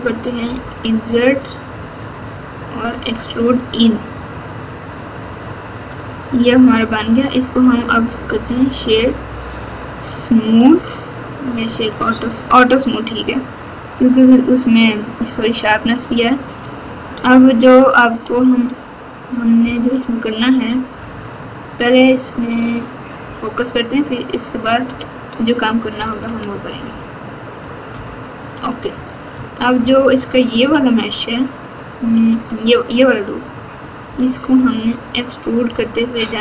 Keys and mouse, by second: 0.4 i, 2.9 e, 5.8 Tab, 7.1-8.6 right drag, 9.6-10.6 right drag, 11.7 middle click, 16.6 Tab, 21.0 Tab, 24.8 KP_8, 27.9 ctrl+KP_8, 28.4 ctrl+KP_8, 28.5 ctrl+KP_8, 29.3 Tab, 30.6 2, 32.4 alt+click, 34.5 KP_7, 34.7 KP_7, 35.6 KP_1.